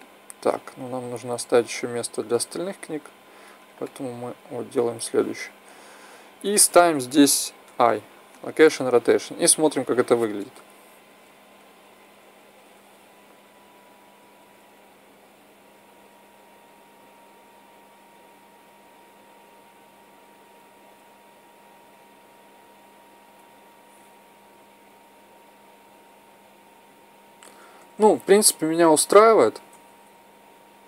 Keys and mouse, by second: 1.5 click, 3.7-5.8 middle drag, 7.5 i, 9.6 drag, 11.1 Right, 11.4 Right, 11.7 Right, 11.9 Right, 12.1 Right, 12.2-12.8 Right, 13.0 Right, 13.1 Right, 13.3 Right, 13.5 Right, 13.7 Right, 13.9 Right, 14.0 Right, 14.3-14.8 Right, 15.0 Right, 15.2 Right, 15.5 Right, 15.7 Right, 16.0 Right, 16.2 Right, 16.6 Right, 17.0 Right, 17.4 Right, 18.0 Right, 18.5 Right, 19.7 Right, 20.1 Right, 20.5 Right, 20.9 Right, 21.7 Right, 24.0 Left, 24.3 Left, 24.4 Left, 24.6 Left, 24.8 Left, 25.0 Left, 25.2 Left, 25.4 Left, 25.6 Left, 25.8 Left, 26.0 Left, 26.2 Left, 26.5 Left, 26.8 Left, 27.1 Left, 27.4 Right, 27.7-29.1 Right, 29.2 Right, 29.6 Left, 29.8 Left, 29.9 Left, 30.1 Left, 30.3 Left, 30.5 Left, 30.7 Left, 30.8 Left.